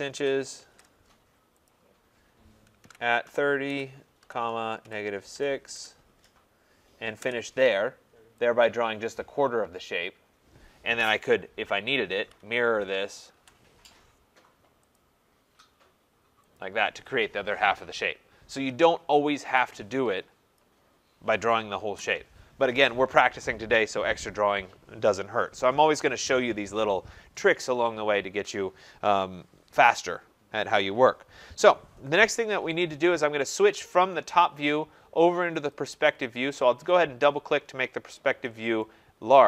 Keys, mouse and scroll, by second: 0.0-1.1 typing, 1.7 click, 2.6-5.4 typing, 5.8 Return, 7.2 Return, 8.6 typing, 8.7 click, 11.9-13.9 typing, 15.0 click, 16.6 click, 19.3 Escape, 19.5 Escape, 20.6 click, 21.9 Delete, 35.7 click, 35.9 click, 37.4-38.9 scroll.